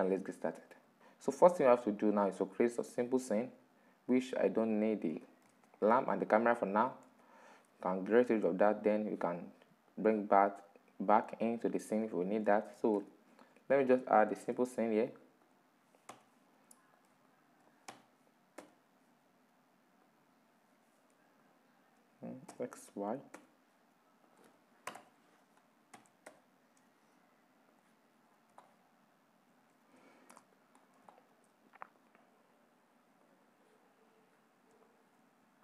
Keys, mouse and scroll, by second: 1.1-1.6 scroll down 4, 1.6-2.4 middle drag, 2.4-2.8 scroll down 2, 2.8-4.8 middle drag, 4.8 right click, 5.1 x, 5.9 click, 6.5 right click, 6.7 x, 7.6-8.4 middle drag, 8.4 right click, 9.5-11.8 drag, 11.8 middle click, 12.6 shift+s, 14.0 shift+a, 15.7 s, 16.9 middle click, 17.5 s, 21.0-22.1 middle drag, 22.1 r, 24.6 ctrl+z, 25.5 s, 27.9-28.2 scroll down 6, 28.2-29.2 middle drag, 29.2-29.7 scroll up 5, 29.7-30.2 shift+middle drag, 30.2 right click, 30.4 scroll down 5, 30.7-31.6 shift+middle drag, 31.6-34.5 drag, 34.5-35.3 shift+middle drag, 35.3-35.6 drag.